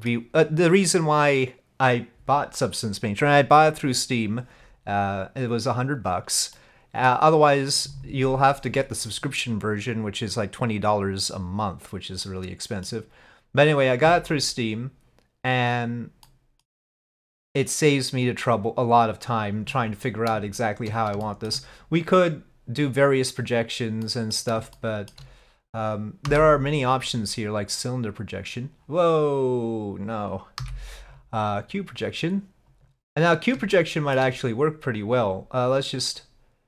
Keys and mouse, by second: 18.5 click, 21.3 shift+click, 24.2 click, 24.8 shift+click, 26.3 u, 30.6 u, 33.9 shift+click.